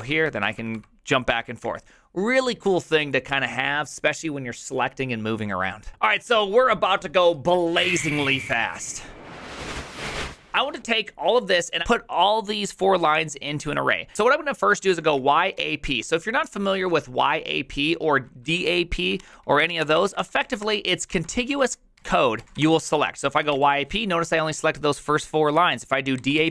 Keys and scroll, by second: 0.0-1.1 typing, 14.7-16.0 typing, 18.2-24.0 typing, 25.9-26.5 typing.